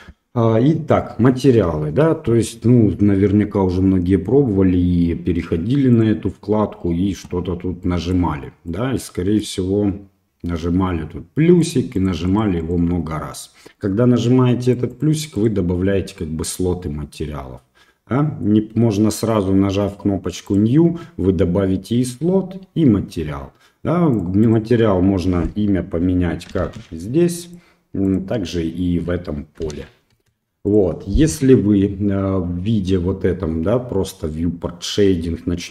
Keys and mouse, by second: 6.0 click, 7.8-8.2 drag, 8.8 click, 12.3 click, 12.6 click, 14.8 click, 15.0 click, 15.1 click, 15.4 click, 20.5 click, 24.2 click, 24.5-27.6 drag, 28.1-30.9 drag.